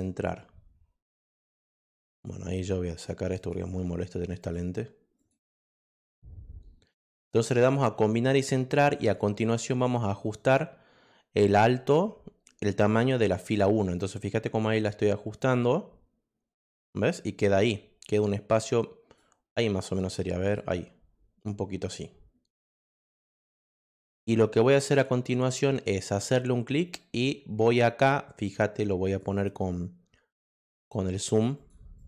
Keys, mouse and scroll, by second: 1.2 click, 13.4-16.8 drag, 18.0-19.1 drag, 20.0 click, 23.9 click, 24.6 click.